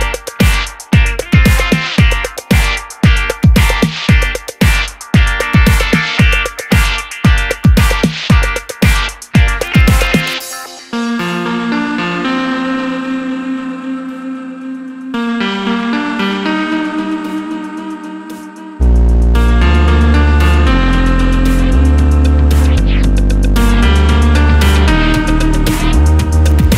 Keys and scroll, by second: 19.3-20.2 typing, 25.3-26.1 typing.